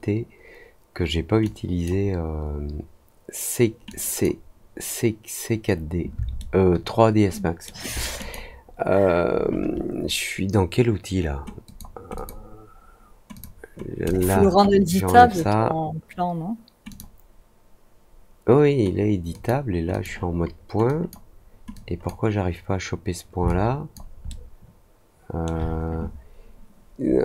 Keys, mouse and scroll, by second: 1.4-1.8 drag, 3.8 click, 6.3-7.6 alt+middle drag, 8.1 click, 11.6 click, 12.1 click, 13.3 click, 14.0 click, 15.1 click, 16.8 click, 19.2 click, 19.8 click, 20.8 drag, 21.7 click, 23.4 alt+click, 24.2-25.4 alt+middle drag.